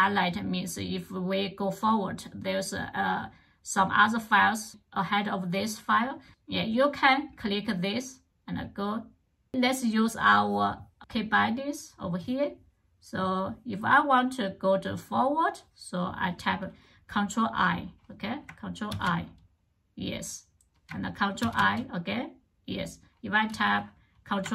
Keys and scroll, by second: 18.7 ctrl+i, 21.2 ctrl+i, 24.4 ctrl+o.